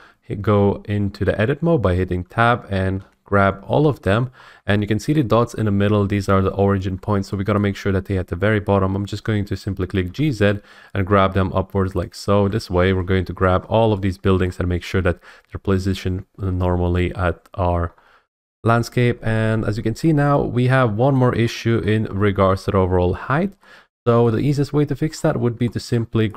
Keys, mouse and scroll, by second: 1.8 Tab, 4.3 middle click, 4.4 middle click, 5.1 shift+middle click, 6.9 middle click, 7.1 middle click, 7.6 shift+middle click, 10.0 g, 10.2 z, 12.0 click, 12.2 Tab, 13.4-13.8 scroll, 14.4-15.4 scroll, 17.1-17.8 scroll, 17.8 scroll, 18.3 F8, 18.3 F8, 20.0 scroll, 21.1 scroll, 21.8-22.2 scroll, 24.2 middle click, 24.3 middle click, 25.1 middle click, 25.1 middle click, 25.7 scroll.